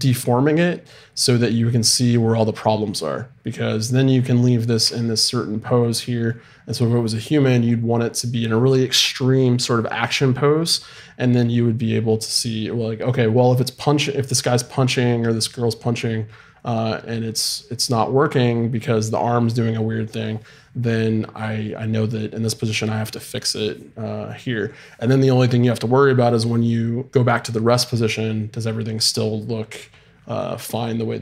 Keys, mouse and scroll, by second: 5.3-11.1 middle drag.